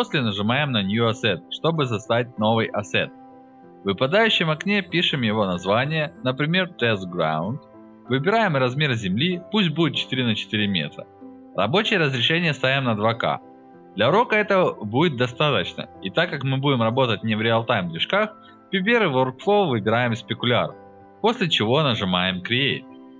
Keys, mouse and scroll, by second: 0.6 click, 1.3 click, 5.1-5.9 typing, 6.1 click, 7.4 click, 8.3 click, 11.0-12.1 drag, 14.0 click, 17.0 click, 19.5 click, 20.3 click, 21.8 click, 22.9 alt+middle click.